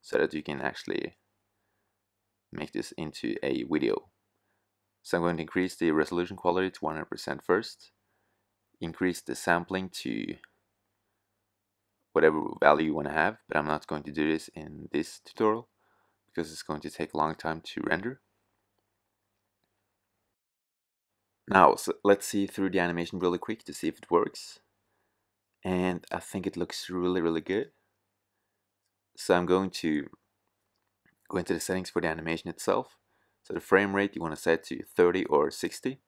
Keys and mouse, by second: 3.0-6.2 drag, 7.7-16.8 drag, 26.3-27.3 drag, 33.0-36.0 drag.